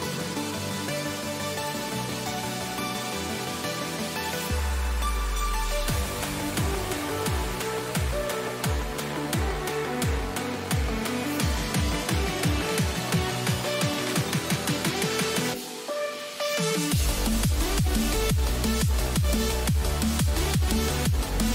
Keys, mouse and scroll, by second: 0.1-2.3 right drag, 1.0-3.0 drag, 2.3 a, 3.6 middle click, 5.4-7.2 right drag, 6.3-8.4 drag, 7.6 a, 8.4-10.2 right drag, 9.3-11.2 drag, 10.6 a, 11.2-18.8 middle drag, 19.7 Tab, 20.6-21.5 middle drag.